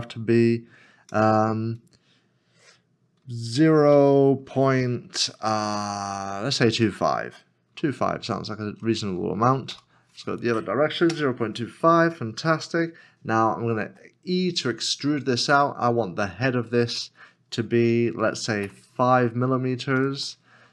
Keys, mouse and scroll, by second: 3.9 e, 8.1 2, 8.2 5, 9.7 -, 11.1 Return, 13.9 Return, 18.6 e, 18.7 KP_5.